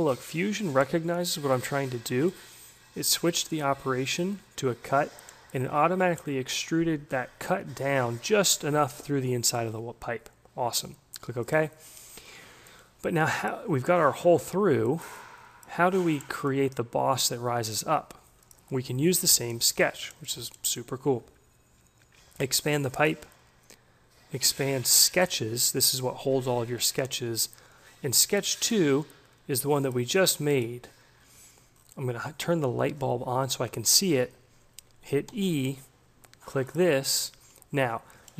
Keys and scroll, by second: 34.8 e.